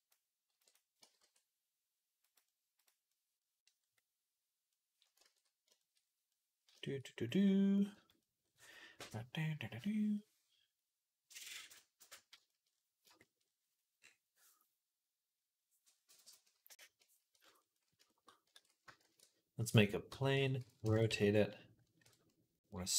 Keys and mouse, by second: 0.3 b, 0.8 g, 2.3-6.1 middle drag, 2.6 click, 6.1 ctrl+s, 7.1-12.4 middle drag, 7.8 z, 12.5 middle click, 13.1 shift+middle click, 15.7 click, 17.4 click, 18.4 ctrl+s, 18.9 shift+a, 19.9 Tab, 20.2 r, 20.7 click, 20.9 Tab, 20.9-22.9 drag, 21.8 KP_1.